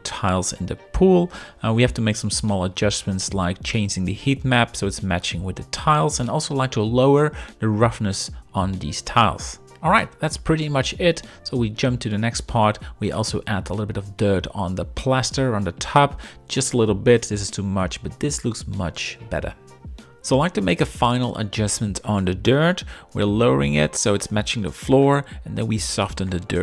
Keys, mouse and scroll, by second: 4.2 shift+middle click, 5.1-7.1 drag, 13.4 click, 15.3 shift+middle click, 16.0 middle click, 17.3-19.0 drag, 23.2-26.4 middle drag.